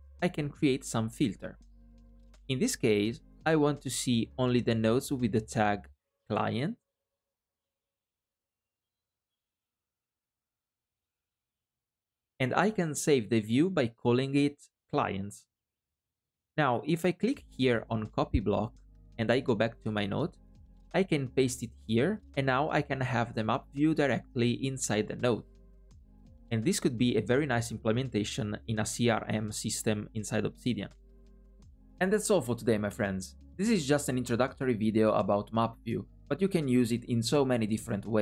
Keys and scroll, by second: 20.4 super+v.